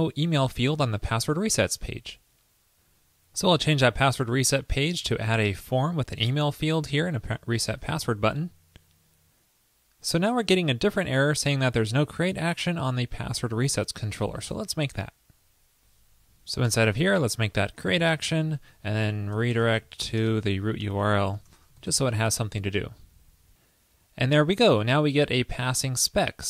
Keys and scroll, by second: 4.4 super+a, 5.0 super+v, 8.0 super+s, 22.1 super+s.